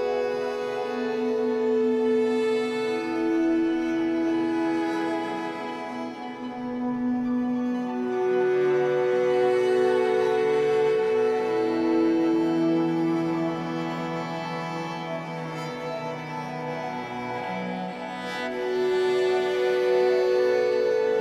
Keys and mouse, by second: 0.5 ctrl+s, 0.5-6.9 ctrl+drag, 7.2 i, 7.6-10.5 drag, 10.5 Right, 11.6-12.0 typing, 15.1 shift+click, 16.3 click, 19.2 click.